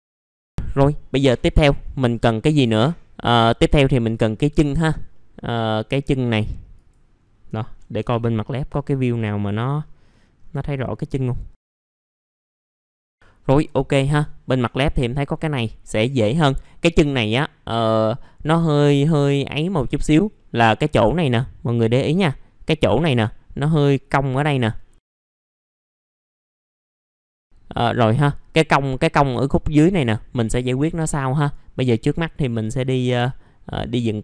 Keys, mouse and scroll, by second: 5.6-6.2 scroll up 1, 6.2 middle click, 6.7 click, 7.1-7.8 scroll down 1, 9.4 click, 9.7-10.7 scroll up 1, 10.7 middle click, 20.8-24.9 scroll up 1, 24.9-25.2 scroll down 1, 25.2 middle click, 25.4-25.7 scroll up 1, 25.7 click, 25.8 scroll down 1, 26.3 alt+middle click, 26.4 middle click, 26.9 click, 27.3 middle click, 27.4-27.8 scroll up 1, 27.8 click, 31.3 right click, 32.0 click, 32.5 middle click, 32.9-33.7 scroll up 1, 33.7-34.0 scroll down 1, 34.0 middle click.